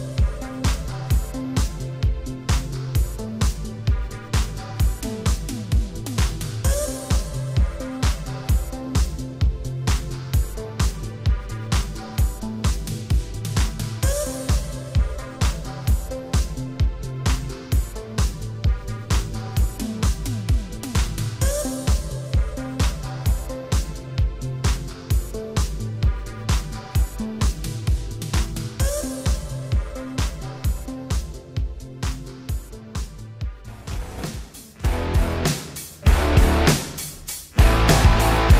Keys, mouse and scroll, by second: 0.5 click, 0.6 click, 1.5 g, 2.6 click, 3.1 click, 3.9 shift+space, 4.7 Escape, 5.1 space, 5.7 Escape, 6.1 shift+space, 7.1 Escape, 8.9 click, 12.2 click, 12.3 click, 13.8 click, 15.0-15.5 typing, 15.8 click, 17.0 g, 17.8 click, 17.9 click, 18.4 click, 19.1 shift+space, 20.0 Escape, 21.2 click, 26.4 ctrl+c, 26.7 Down, 26.9 scroll down 2, 27.3 scroll, 27.5 scroll up 1, 27.6 ctrl+v, 28.0 scroll down 1, 28.3 scroll down 1, 28.7 shift+space, 29.2 Down, 29.6 Escape, 30.1 ctrl+s, 30.3 scroll down 3, 30.6 middle click, 31.0 ctrl+s, 32.1 ctrl+s, 33.3 shift+space, 34.8 scroll up 2, 35.2 middle click, 35.8 shift+middle click, 36.8 middle click.